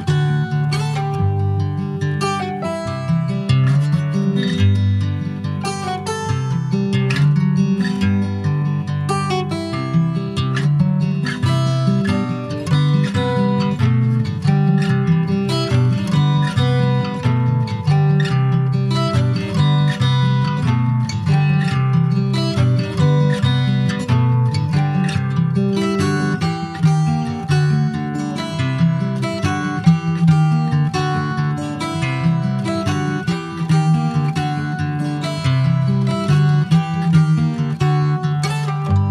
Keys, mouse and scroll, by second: 1.7 click, 3.3-7.4 middle drag, 7.4-8.8 drag, 11.4 click, 12.4 click, 13.8 click, 14.3 click, 16.1 click, 16.5 click, 19.9-25.8 drag, 25.8-26.9 middle drag, 26.9 click, 27.7 h, 28.0 click, 29.2-31.6 middle drag, 31.6 click, 33.5-35.0 drag, 35.0-37.9 middle drag, 38.0 shift+middle click, 38.5-39.1 scroll up 1.